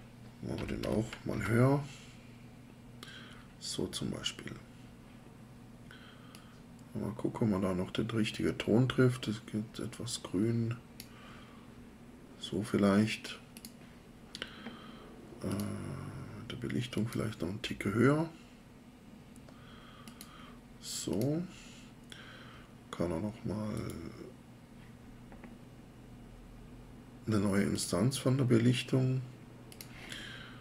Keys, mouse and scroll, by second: 0.3-1.3 typing.